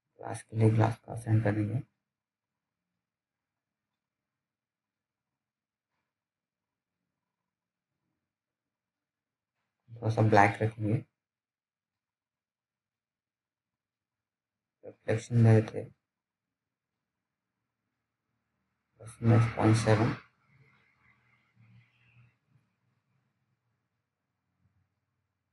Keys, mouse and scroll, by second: 2.8-3.1 scroll up 1, 3.1 click, 21.9 click.